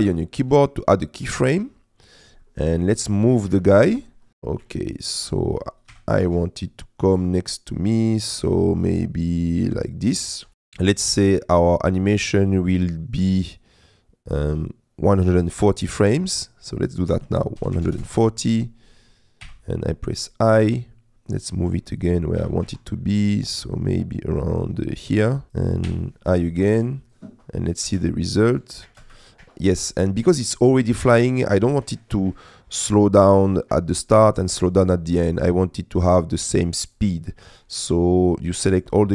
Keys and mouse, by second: 2.5 middle click, 4.3 middle click, 4.9 shift+click, 6.2 g, 6.2 shift+z, 10.5-15.3 drag, 17.1-18.1 drag, 19.5 i, 20.8 click, 22.1 click, 22.5 g, 22.7 shift+z, 22.8 click, 27.2 click, 27.9 space, 29.1 space, 29.5 click, 35.3 click, 36.8 click, 37.5 click, 37.8 a.